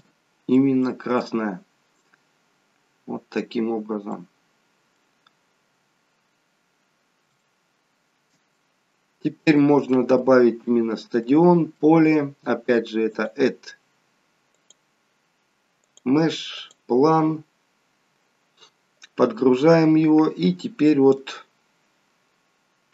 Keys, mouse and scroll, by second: 0.5 scroll up 3, 0.6 middle click, 1.6-2.6 scroll down 11, 3.5 scroll down 18, 4.1 middle click, 5.1-6.2 scroll down 2, 6.2-6.8 scroll down 1, 7.4 shift+middle click, 8.5 middle click, 9.9 middle click, 10.3-11.1 scroll down 6, 11.3 middle click, 13.1 click, 19.8 middle click.